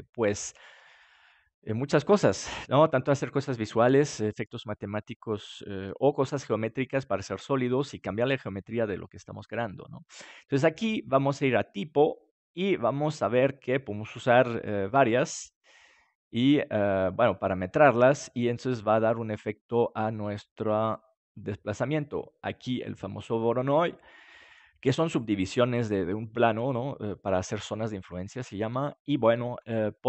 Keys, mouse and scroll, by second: 12.4-18.2 drag, 21.8-23.6 middle drag.